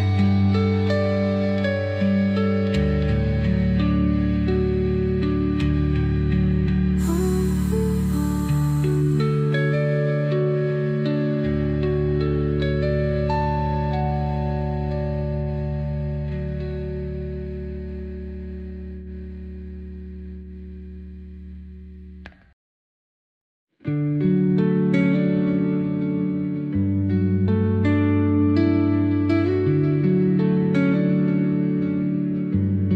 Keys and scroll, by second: 1.1 space, 19.5 space, 24.9 space, 29.0 Delete, 30.7 Delete.